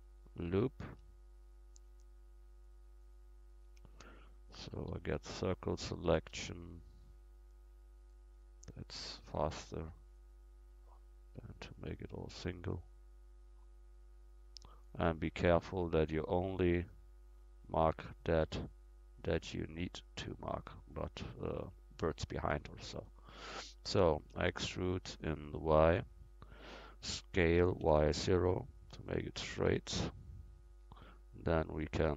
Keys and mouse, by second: 3.7 a, 4.9 c, 8.1 click, 8.4-9.8 middle drag, 9.8 c, 15.7 middle click, 16.8-19.3 right drag, 19.3-21.9 middle drag, 24.4 e, 25.2-27.5 drag, 27.5 s, 30.0-31.8 drag.